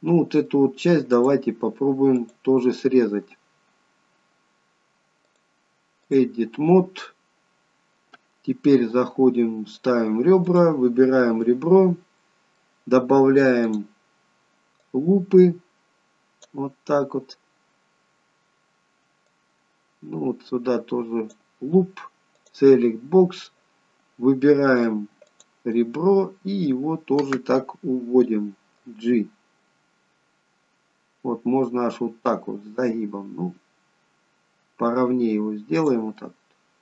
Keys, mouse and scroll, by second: 1.2 click, 2.2 click, 3.8-5.2 scroll down 2, 5.3 click, 6.7-8.3 scroll up 2, 10.4 click, 11.5 middle click, 13.7 click, 14.9 click, 19.4 click, 24.5 click, 24.5 middle click, 25.3 click, 25.8 middle click, 29.0 g, 36.2 middle click.